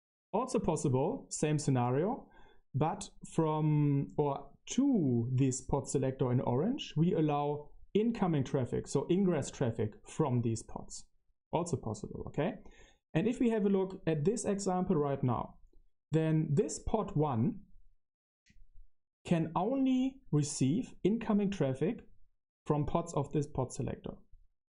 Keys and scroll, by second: 0.1-0.9 typing, 3.4 Page_Up, 3.7 Return, 4.5-8.1 typing, 10.1-17.5 typing, 17.2 super+1, 17.5 super+3, 17.5 super+1.